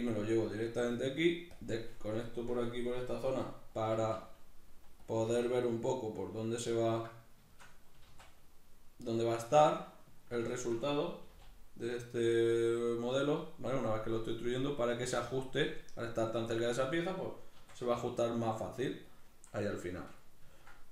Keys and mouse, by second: 0.5 click, 2.0-6.3 shift+middle drag, 3.6 s, 6.3 click, 6.4-9.2 middle drag, 7.7 s, 9.2 click, 9.3-11.9 middle drag, 11.0 g, 11.9 click, 12.0-14.8 middle drag, 14.8-16.3 drag, 16.3-18.9 middle drag, 17.3 s, 18.9 click, 19.2-20.9 middle drag.